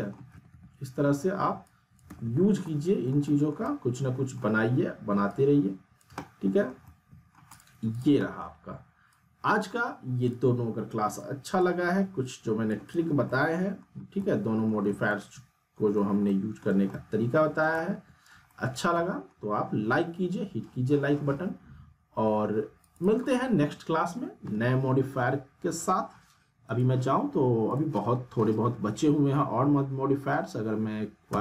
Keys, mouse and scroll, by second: 0.1 alt+middle click, 0.3 alt+w, 1.6-2.3 click, 2.1 alt+w, 2.6-3.5 alt+middle click, 3.6-4.6 alt+middle drag, 5.3-6.7 click, 6.1 alt+middle click, 6.7 scroll down 1, 6.8-7.5 alt+middle click, 7.5 click, 8.2 alt+middle click, 9.4-9.7 click, 13.2-13.9 alt+middle click, 13.8 scroll up 1, 14.2-14.8 alt+middle click, 15.1-16.0 ctrl+alt+middle drag, 22.8 click, 26.6 click, 31.3 q.